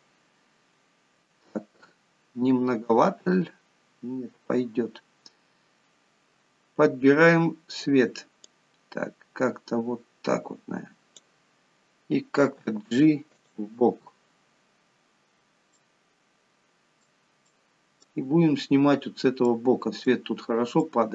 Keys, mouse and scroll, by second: 1.6-2.0 scroll up 6, 5.1-5.7 scroll down 2, 6.5-7.5 scroll down 5, 7.5-8.0 scroll down 3, 9.0 click, 12.9 g, 14.2-15.3 scroll up 12, 15.5 scroll down 1, 16.2 middle click, 17.9 middle click, 18.6-19.4 scroll down 3, 19.4-19.9 scroll up 3, 19.9 middle click.